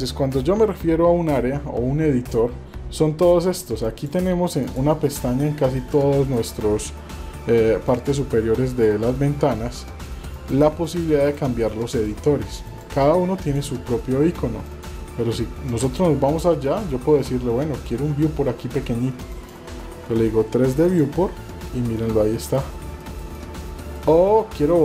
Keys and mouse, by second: 3.8-4.8 drag, 5.9 click, 7.9 click, 11.2 click, 12.7 click, 14.6 click, 19.4-21.0 drag, 22.1-22.5 middle drag, 23.1 shift+middle click, 23.5-24.0 middle drag.